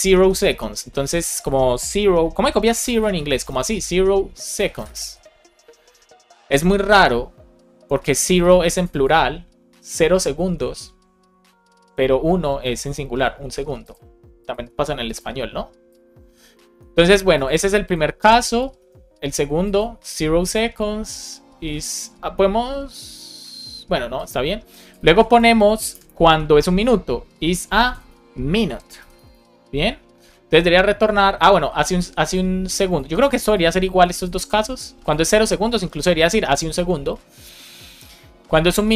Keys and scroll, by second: 3.6 space, 16.6 super+c, 18.7 BackSpace, 25.0 super+c, 25.8 Return, 26.2 super+v.